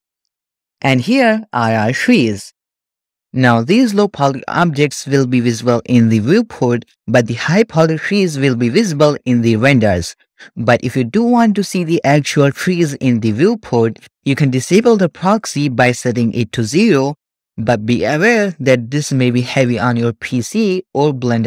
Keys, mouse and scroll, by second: 0.3-2.7 shift+middle drag, 16.4 click, 18.9-19.4 scroll down 2, 19.6-21.4 middle drag.